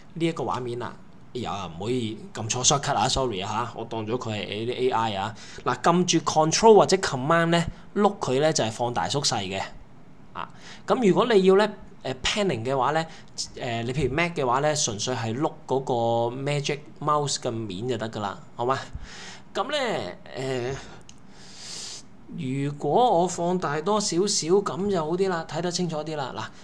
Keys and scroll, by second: 0.0 super+space, 0.0 super+space, 0.1 super+space.